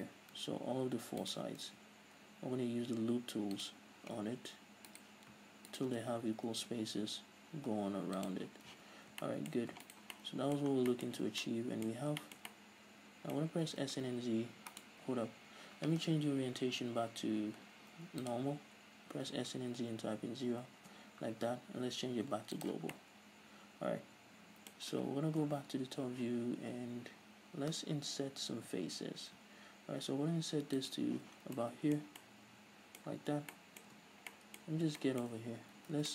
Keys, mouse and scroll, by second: 0.1-0.6 right drag, 1.4 ctrl+right drag, 1.8 w, 5.1 right click, 6.2 w, 8.9 z, 9.4-10.0 shift+middle drag, 10.0 alt+right click, 10.3-17.5 middle drag, 10.9 scroll down 2, 11.3 z, 12.1-12.4 scroll up 2, 13.7 б, 14.1 s, 15.2 right click, 17.4 ,, 19.3 s, 21.1 Return, 22.0 ,, 23.2-29.9 middle drag, 25.6 KP_7, 26.4 z, 26.7-28.4 scroll up 2, 28.4-29.9 drag, 28.4-29.9 right drag, 28.4 i, 31.1 shift+click, 31.3 z, 31.6 scroll down 2, 31.8-33.4 middle drag, 33.4 Tab, 33.5-36.1 middle drag, 34.1 Tab, 34.2-35.2 scroll up 4, 35.9 scroll down 1.